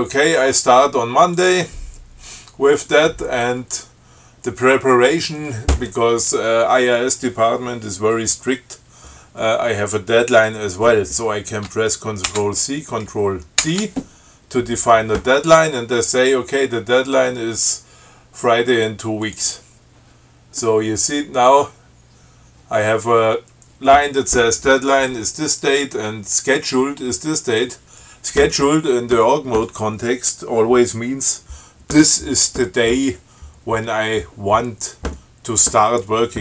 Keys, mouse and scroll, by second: 1.6 click, 12.5 ctrl+c, 13.8 ctrl+d, 19.4 click.